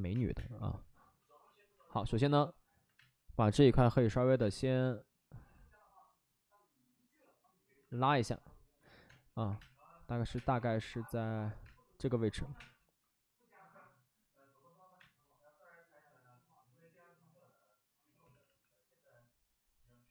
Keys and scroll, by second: 0.0 1, 0.3 space, 0.5 1, 1.6 ctrl+z, 2.9 space, 3.6 space, 4.3 space, 9.0-10.5 typing, 11.5 space, 12.4 5, 12.5 space, 14.9 space, 17.4 space, 18.2 ctrl+z, 18.3 ctrl+z, 20.0 space.